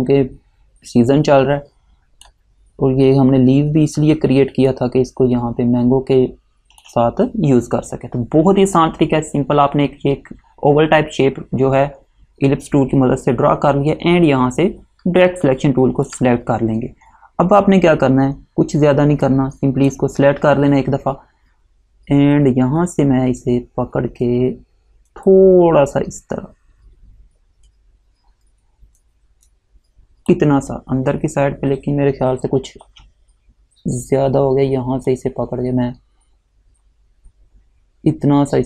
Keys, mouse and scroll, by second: 4.3 space, 16.2 click, 19.4 click, 25.4 click, 35.2 click.